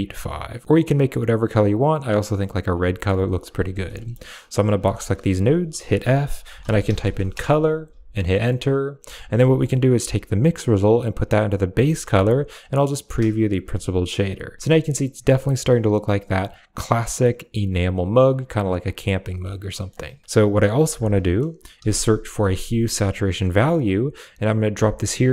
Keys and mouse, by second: 3.3 click, 3.8 middle click, 4.3 click, 4.6 g, 4.9 click, 5.6 f, 7.8 a, 8.0 middle click, 8.0 click, 8.5 click, 8.8 g, 9.1 click, 9.3 a, 9.8 click, 10.5-11.6 drag, 12.7 ctrl+shift+click, 15.7 middle click, 18.9 middle click, 19.6 middle click, 20.5 middle click, 21.0 shift+a.